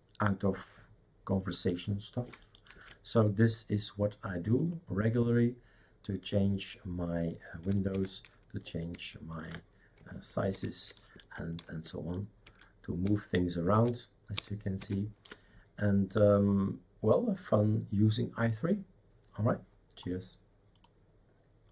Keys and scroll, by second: 2.8 shift+super+q, 7.9 ctrl+alt+Right, 10.5 shift+super+Return, 11.6 shift+super+Left, 12.5 shift+super+Right, 13.1 shift+super+Left.